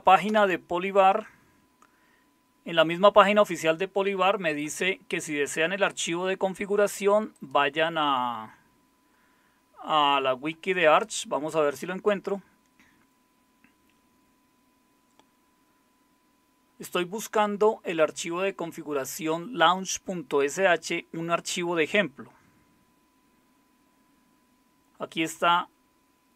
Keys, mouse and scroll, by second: 0.3 Return.